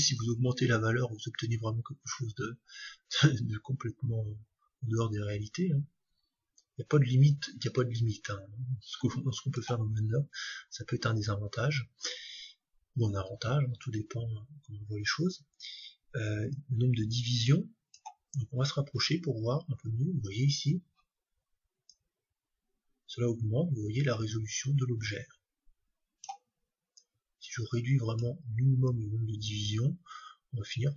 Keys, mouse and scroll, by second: 10.4-12.2 drag, 16.5-18.4 drag, 21.8-23.8 drag, 26.9-30.7 drag.